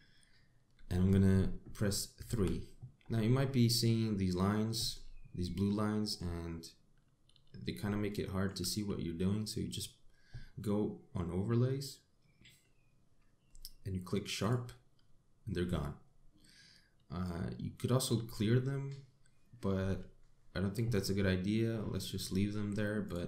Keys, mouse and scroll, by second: 2.9 3, 3.9 scroll down 2, 4.2 middle click, 6.3 shift+middle click, 8.2 scroll up 1, 8.7 shift+middle click.